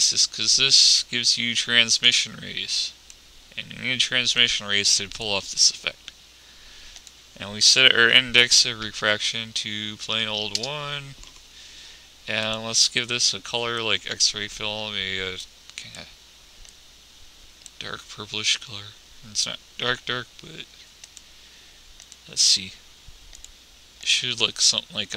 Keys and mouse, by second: 23.2 click.